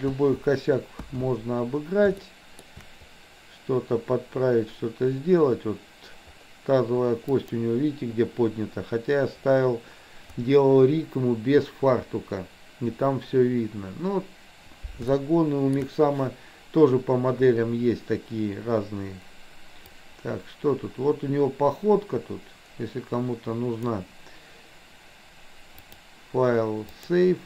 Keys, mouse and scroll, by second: 1.0 KP_1, 2.3 shift+middle click, 7.4 click, 15.1 shift+middle click, 20.0-24.0 drag, 25.9-27.1 drag.